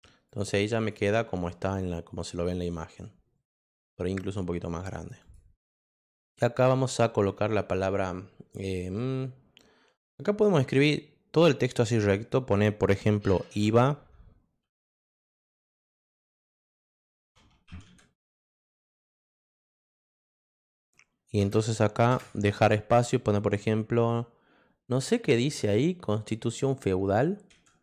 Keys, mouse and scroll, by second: 0.2 click, 0.8 click, 5.2 click, 13.5 i, 15.4 a, 16.6 BackSpace, 18.4-22.1 typing, 27.5-27.8 typing.